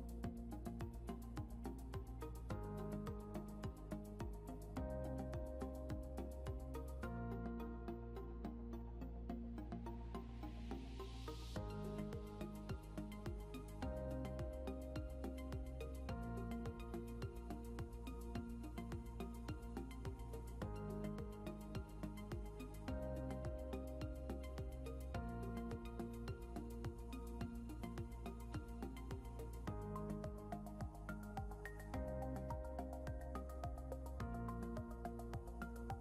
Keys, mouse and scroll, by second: 4.2-8.1 typing, 9.7-12.9 typing, 12.6-19.2 drag, 22.9-31.0 alt+shift+drag, 23.7-24.6 typing, 26.7 typing.